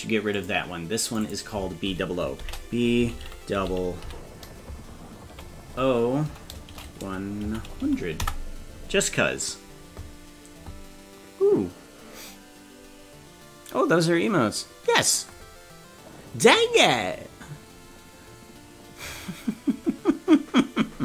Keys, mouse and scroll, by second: 0.0 click, 0.5 click, 1.1-9.7 drag.